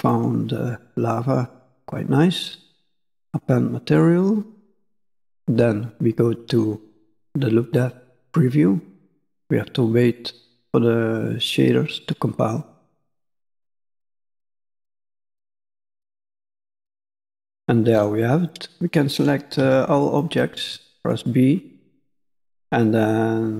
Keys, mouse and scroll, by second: 2.6 click, 7.5 click, 16.9 middle click, 18.4 middle click, 18.4-18.8 scroll down 2, 19.5 b, 21.7 middle click, 22.4 scroll up 1.